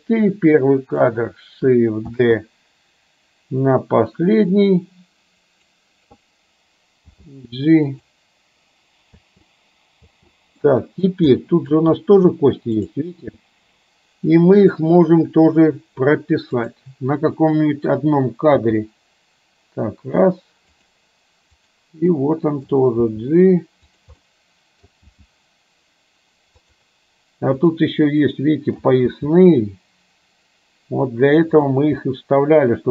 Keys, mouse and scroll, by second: 0.4 click, 2.2 shift+d, 7.1 g, 9.2 space, 10.1 space, 10.7 middle click, 11.5 middle click, 13.0 click, 13.5-14.9 middle drag, 16.7 click, 18.7 g, 21.7 click, 22.2 middle click, 23.1 g, 24.2-25.1 middle drag, 25.2 g, 27.6 click, 28.4 middle click, 29.1 g, 32.1 scroll up 1, 32.2-32.9 middle drag.